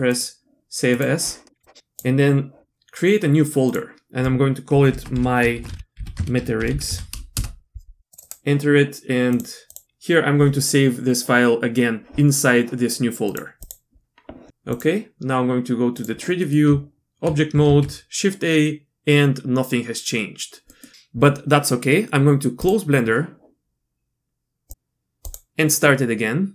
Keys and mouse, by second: 0.1-1.1 drag, 14.8-16.4 drag, 16.4 middle click, 16.7 Tab, 17.6 shift+a.